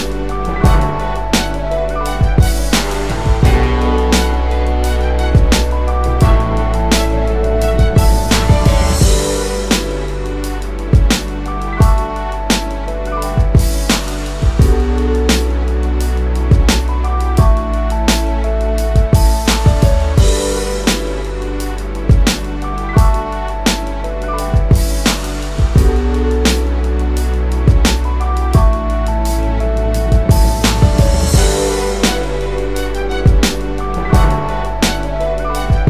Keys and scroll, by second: 4.1 space, 10.6 space, 15.5-16.3 space, 21.9 space, 22.4 space, 29.0 2, 29.5 Tab, 29.8 2, 30.7 Return.